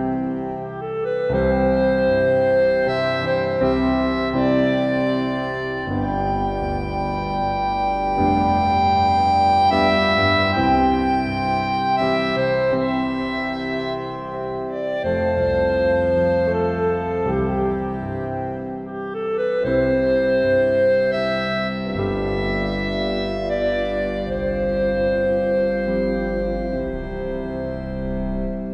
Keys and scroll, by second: 2.3 ctrl+t.